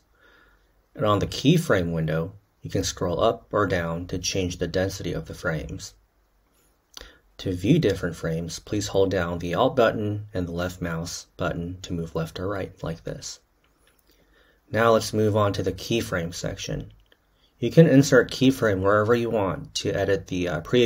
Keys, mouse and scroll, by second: 1.8-7.4 middle drag, 7.4-14.2 alt+drag, 14.2 k.